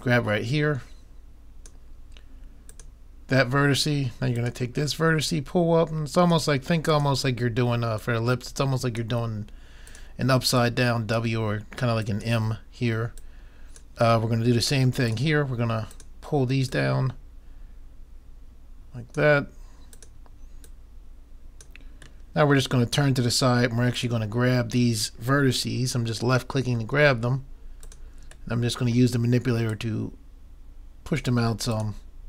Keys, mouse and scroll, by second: 2.7-3.8 drag, 3.8 middle click, 4.4-9.8 drag, 10.0-14.9 drag, 15.0-18.6 drag, 18.5 middle click, 19.9-22.3 drag, 22.3 middle click, 24.0-25.6 drag, 25.6 middle click, 26.4-28.1 middle drag, 27.9-31.4 drag, 29.5 middle click, 29.8 middle click, 31.8-32.2 drag.